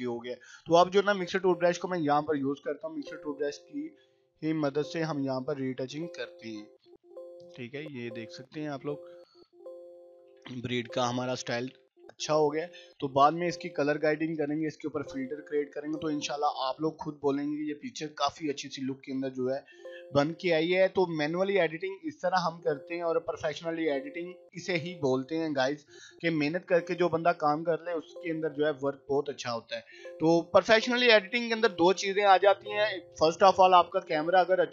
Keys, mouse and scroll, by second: 0.3 click, 0.6 scroll down 1, 0.9 [, 1.2 ], 1.5-2.8 click, 2.7 ], 3.2-4.7 drag, 4.5 [, 4.8-5.7 click, 5.7-13.2 typing, 6.4 click, 7.3 click, 7.7-8.4 click, 8.6 click, 8.9 scroll down 1, 9.5-10.4 click, 10.7-11.6 click, 12.1-13.0 click, 13.4-14.7 click, 14.6 [, 14.9-15.5 click, 15.4 ], 15.6 ], 15.8-17.3 drag, 17.9 [, 18.2-19.4 click, 19.4 ], 19.7-20.7 click, 20.8 scroll up 1, 21.2-22.4 click, 22.3-24.4 typing, 22.5 click, 23.7 click, 24.2 scroll up 1, 24.8-25.6 click, 25.6-27.8 typing, 25.8 scroll up 1, 26.9-27.5 click, 27.9-29.8 drag, 29.7 ], 29.9-30.4 click, 30.4 ], 30.6-31.2 click, 31.2 [, 31.4-32.3 click, 32.3 ], 32.5-33.1 click, 33.1 ], 33.2 click, 33.8 ], 34.3 scroll down 1.